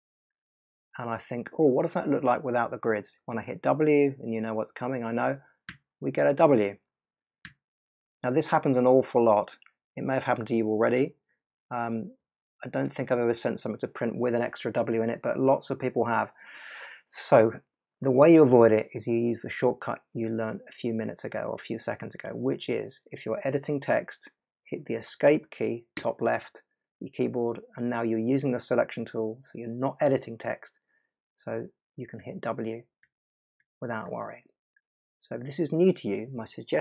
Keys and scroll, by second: 5.6 w, 7.4 w, 12.2 BackSpace, 25.9 Escape, 32.1 w.